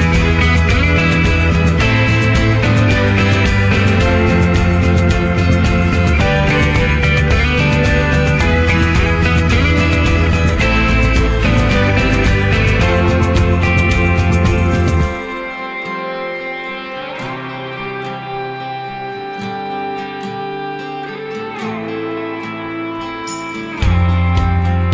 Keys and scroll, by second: 5.8 ctrl+z, 8.8 ctrl+z, 12.9 ctrl+z, 15.3 ctrl+t.